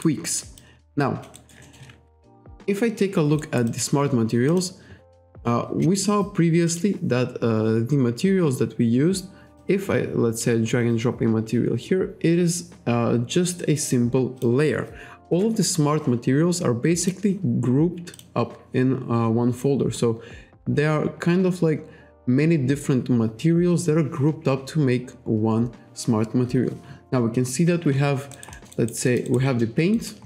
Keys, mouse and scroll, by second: 0.3 alt+middle click, 0.6 alt+click, 3.4 alt+right click, 3.7 alt+click, 4.5 click, 6.7 click, 9.6 click, 14.4 click, 15.3 Delete, 17.0 click, 18.2 click, 18.8-19.2 scroll down 1, 19.6-20.0 scroll down 1, 28.4 alt+right click, 28.5 alt+middle click, 28.7 alt+right click, 29.1 alt+middle click, 29.3 alt+right click, 30.0 alt+right click.